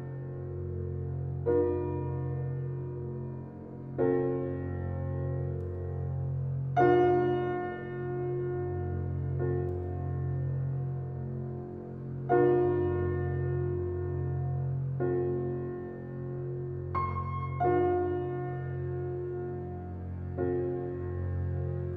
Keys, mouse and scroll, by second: 2.1-2.8 scroll up 2, 2.8 scroll up 1, 2.9 drag, 9.1 click, 9.9 click, 10.9 g, 15.8 drag.